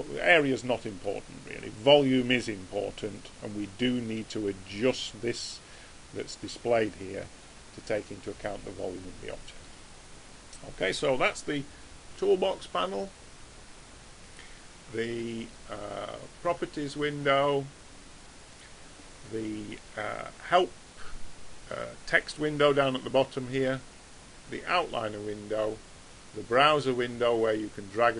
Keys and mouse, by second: 1.1 click, 8.0-12.3 middle drag, 12.3 t, 13.3 t, 16.5 n, 17.5 n, 27.3 click.